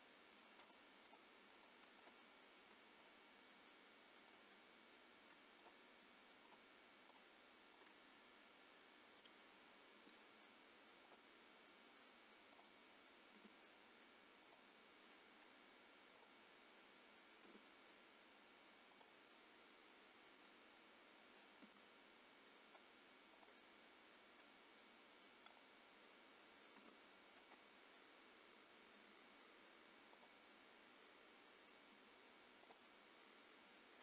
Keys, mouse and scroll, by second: 0.0-0.6 scroll up 5, 0.6 shift+click, 1.4 shift+click, 2.0 shift+click, 3.0 click, 4.2 shift+click, 5.6 click, 6.5 shift+click, 7.2 click, 8.2 shift+click, 8.2 scroll down 3, 8.5 middle click, 9.9 r, 12.5 click, 13.4 r, 14.7 middle click, 16.3 click, 17.5 r, 19.2 middle click, 20.4 middle click, 21.7 g, 23.6 middle click, 25.5 click, 25.8 middle click, 26.8 g, 27.6 middle click, 29.0 g, 30.3 middle click, 32.0 g, 33.0 middle click.